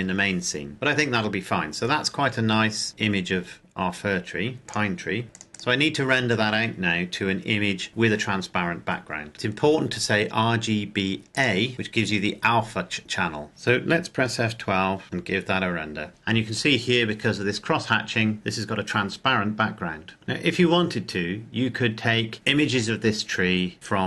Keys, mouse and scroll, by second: 2.8 scroll up 1, 3.7-5.1 scroll down 1, 5.1 click, 9.3-10.6 scroll down 1, 11.4 click, 15.3 F12, 16.1-16.4 scroll down 1.